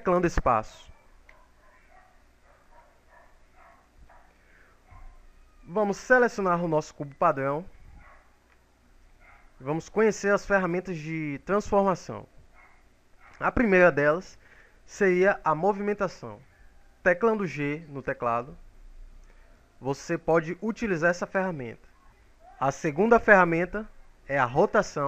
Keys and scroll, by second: 2.9 shift+space, 16.8 g.